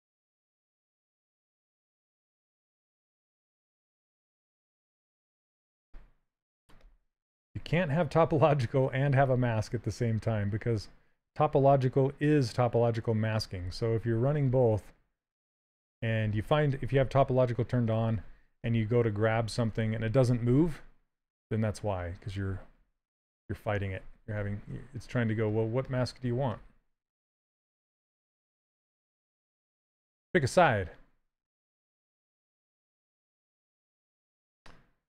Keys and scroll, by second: 8.9 s, 14.2 s, 20.8 ctrl+z.